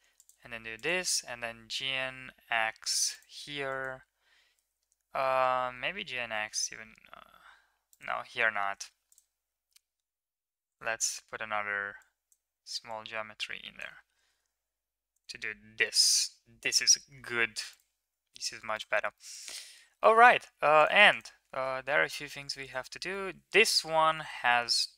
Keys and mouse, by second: 3.6 middle click, 5.3 g, 8.4 ctrl+r, 11.9 click, 12.8 click, 14.0 g, 15.7 Tab, 19.2-19.6 middle drag, 19.8 shift+middle drag, 20.1 middle click, 20.6 middle click, 20.9 click, 21.3 Tab, 21.7 middle drag, 22.4 click, 23.0-24.1 middle drag, 24.6 middle click.